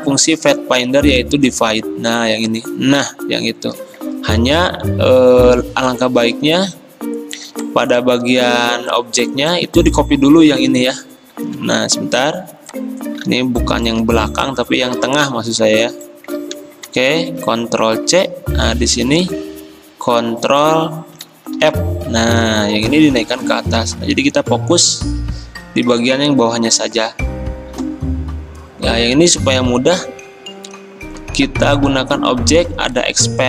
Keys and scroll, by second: 3.8 ctrl+z, 8.3 ctrl+z, 9.6 ctrl+z, 11.4 ctrl+z.